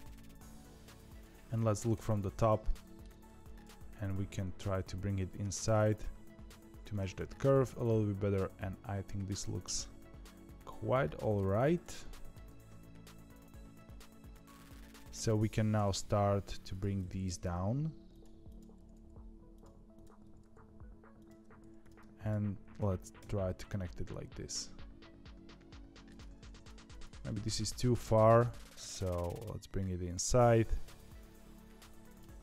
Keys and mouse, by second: 1.9 KP_7, 2.7 shift+middle click, 3.2 2, 3.8 g, 6.8-9.4 middle drag, 10.4 middle click, 11.9 middle click, 12.4 g, 14.2 middle click, 15.7 g, 16.9 click, 17.2 g, 18.4 click, 19.9 click, 20.2 g, 21.5 2, 21.7 click, 23.1 f, 23.6-26.0 middle drag, 26.9 click, 26.9 1, 27.2 middle click, 28.1 g, 30.2-32.1 middle drag.